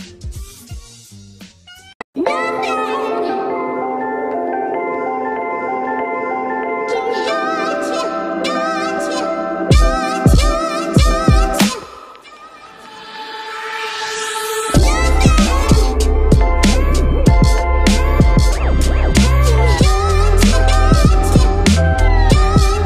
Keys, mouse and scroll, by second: 0.4 ctrl+=, 5.5 ctrl+=.